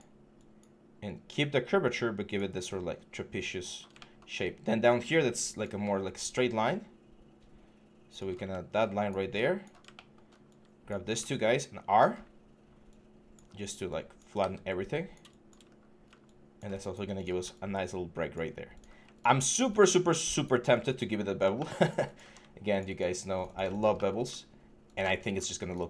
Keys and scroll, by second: 14.2 w, 15.4 6.